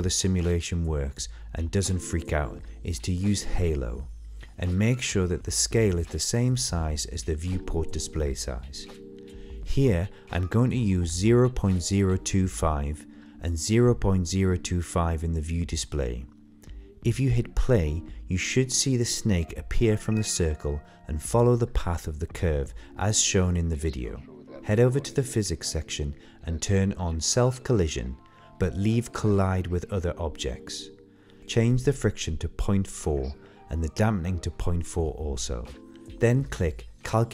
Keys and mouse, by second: 2.0-4.2 drag, 8.4-10.6 drag, 21.0 middle click, 21.2 shift+middle click, 21.4-22.5 middle drag, 22.6 shift+middle click, 22.8 middle click, 23.4-24.1 middle drag, 24.5-25.0 middle drag, 25.5 click, 26.3 click, 27.0 click, 27.1 click, 29.8 click, 33.4 click, 34.5 click.